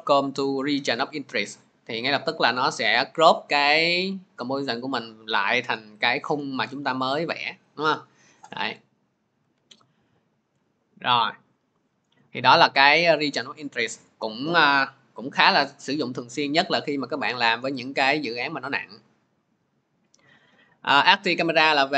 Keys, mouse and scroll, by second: 0.9 click, 9.2 click, 9.8 ctrl+z, 21.3 click.